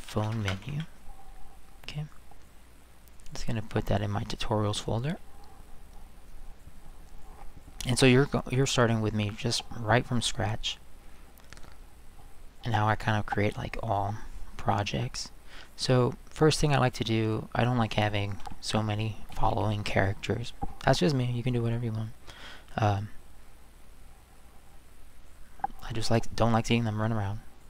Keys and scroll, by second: 0.0-1.2 typing, 18.4 Delete, 19.3 Delete.